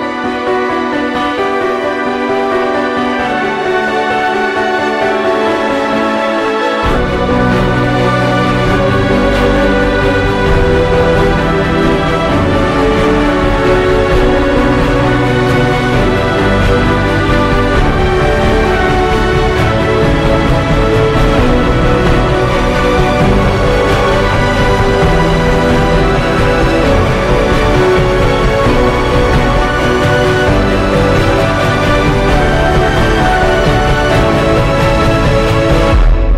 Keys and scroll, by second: 0.1 Up, 2.4 x, 4.7 Down, 7.0 x, 9.4 space, 10.9 ctrl+0, 11.1 ctrl+s, 15.0 ctrl+d, 15.5 Delete, 20.1-21.5 typing, 24.7 ctrl+g, 25.2-29.0 typing, 26.3 ctrl+g, 28.1 ctrl+g, 29.7 ctrl+j, 30.3 ctrl+e, 31.3-32.6 typing, 33.4 ctrl+t.